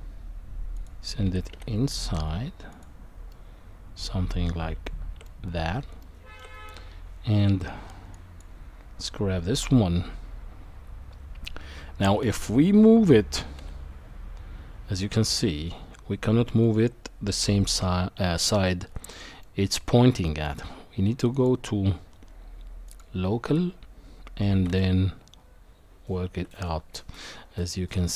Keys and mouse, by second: 1.2 g, 3.3-4.1 middle drag, 4.8 shift+middle click, 6.0-6.4 shift+middle drag, 6.8 Tab, 8.1 click, 12.2 g, 19.1 middle click, 20.3 middle click, 21.3-23.4 drag, 24.5 e.